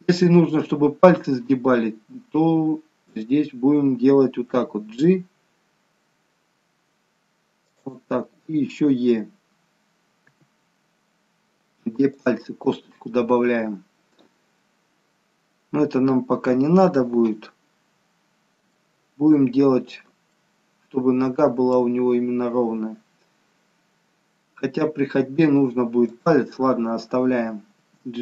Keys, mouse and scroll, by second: 3.1 click, 4.6 g, 10.3 e, 17.4-18.5 scroll down 1, 18.7 shift+middle click, 18.7 scroll down 1, 19.5-19.9 scroll up 4, 20.4 shift+middle click, 20.4-20.8 scroll up 2, 26.2 click, 27.8 g.